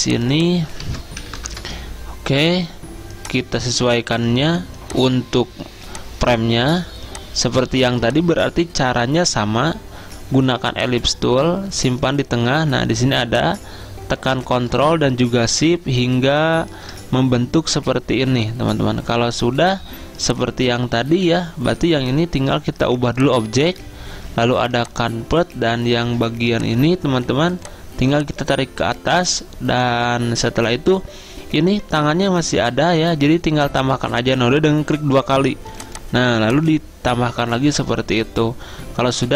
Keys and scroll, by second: 0.9 ctrl+a, 1.0-1.9 typing.